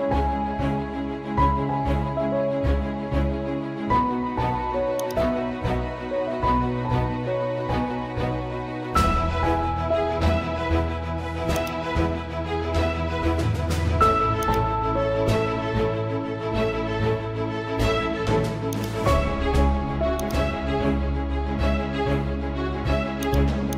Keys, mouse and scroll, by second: 1.0-3.1 typing, 4.9 typing, 5.0-10.0 drag, 10.1 ctrl+Num_Lock, 10.1 click, 10.3 ctrl+z, 11.5-14.4 drag, 17.0 scroll up 1, 18.7 click, 20.5 ctrl+z, 23.2-23.7 drag.